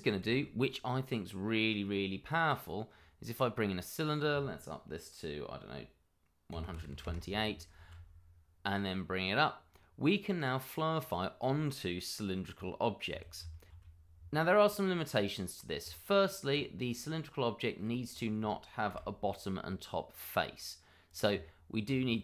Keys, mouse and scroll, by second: 0.2 shift+a, 2.3 click, 6.5 1, 6.6 2, 6.8 8, 7.0 Return, 8.6 click, 9.2-9.7 scroll down 1, 9.7 middle click, 13.6 d, 13.7 z, 14.4 click, 14.8 middle click, 15.8 Tab, 16.9 click, 17.4 middle click, 18.1 shift+click, 18.9 click, 21.0 click, 21.3 Tab, 22.1 middle click.